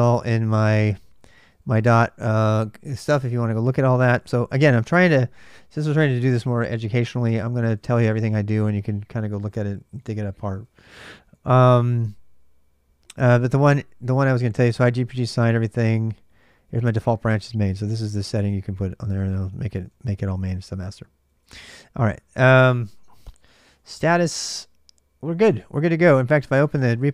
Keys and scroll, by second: 0.7-1.6 typing, 4.3-5.3 typing, 7.1 Return, 7.2-9.4 typing, 10.8 j, 11.0 j, 13.4 k, 13.6 k, 14.6-24.2 typing, 19.4 ctrl+[, 25.7-26.6 typing.